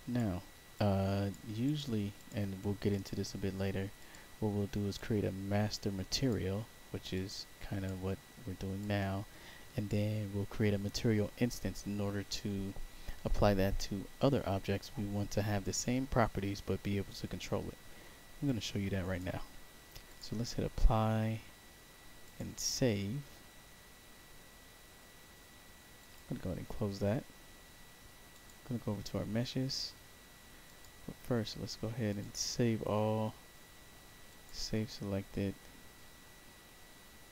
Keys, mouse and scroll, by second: 0.7 click, 1.6 click, 2.1 click, 2.8 click, 3.9 click, 4.9-6.2 drag, 7.0 click, 8.7-9.8 drag, 18.4 click, 20.0 click, 22.2 click, 25.9 click, 28.2 click, 30.6 click, 32.1 click, 34.2 click.